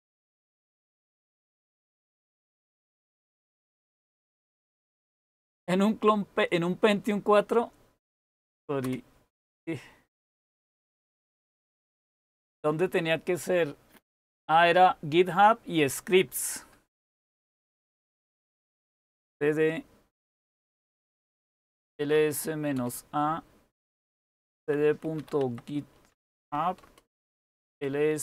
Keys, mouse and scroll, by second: 0.9-1.4 typing, 8.7 Return, 17.7-19.5 typing, 20.5-22.7 typing, 23.7-28.1 typing.